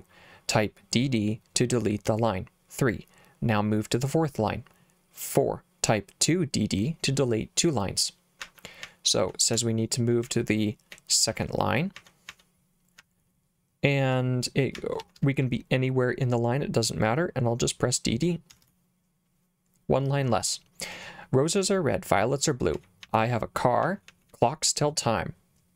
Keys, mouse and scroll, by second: 8.4 j, 8.9 k, 9.6 k, 10.3 k, 11.3 k, 12.0 k, 12.3 k, 13.0 h, 14.8 l, 15.0 l, 15.2 l, 18.6 d, 18.7 d, 22.8-24.3 typing.